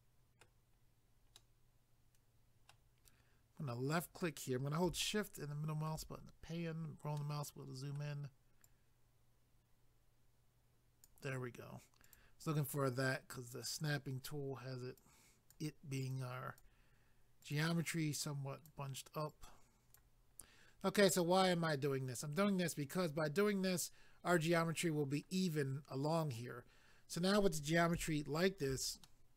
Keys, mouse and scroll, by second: 0.8 scroll up 1, 1.4 middle click, 3.9 click, 5.0 shift+middle click, 6.1 scroll up 1, 7.2 middle click, 8.6 click, 12.0 click, 12.9 click, 15.0 click, 16.1 click, 17.4 click, 18.2 click, 19.3 click, 20.4-21.3 scroll down 1, 28.1 shift+middle click, 29.0 middle click.